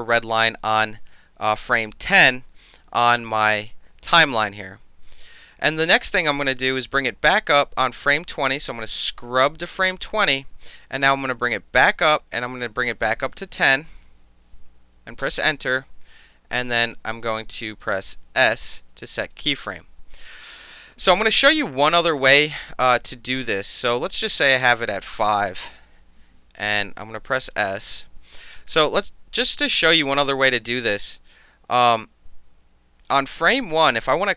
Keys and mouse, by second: 9.0-10.3 drag, 10.6 alt+right drag, 11.5 click, 12.8 click, 13.5 KP_2, 13.7 KP_0, 15.2 KP_Enter, 18.6 s, 19.5 alt+click, 20.4 alt+right drag, 20.8 alt+drag, 24.6 click, 25.4 KP_5, 25.5 KP_Enter, 28.0 alt+s, 29.9-33.1 drag, 33.1-34.3 middle drag.